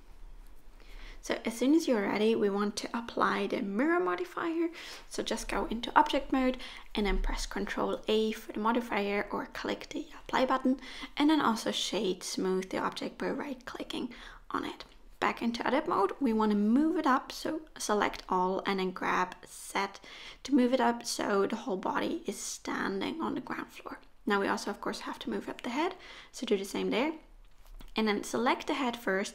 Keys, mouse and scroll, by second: 1.0 middle click, 1.9 middle click, 2.5 middle click, 3.3 shift+middle click, 3.8 scroll up 1, 5.0 Tab, 5.0 middle click, 7.7 click, 9.5 middle click, 10.0 right click, 11.7 middle click, 13.0-13.4 scroll up 2, 13.4 middle click, 13.9 Tab, 14.3 middle click, 14.7-15.2 scroll down 1, 15.2 middle click, 15.2-15.7 scroll down 4, 15.7 a, 16.8 g, 18.6 o, 19.5 KP_1, 20.6 g, 22.8 ctrl+z, 22.8 Tab, 22.8-23.4 scroll up 2, 23.4 g, 25.5 Tab, 26.3 middle click, 26.8 click, 27.0 scroll down 2, 27.1 click, 27.7 shift+click.